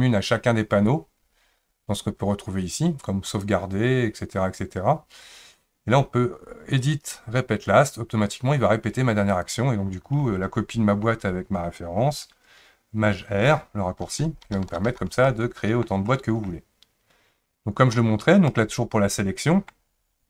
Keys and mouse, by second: 3.3-5.4 drag, 6.9-9.5 drag, 14.1 shift+r, 14.4 shift+r, 14.7 shift+r, 14.9 shift+r, 15.2-15.9 middle drag, 16.0-16.5 shift+middle drag, 18.5-19.7 middle drag.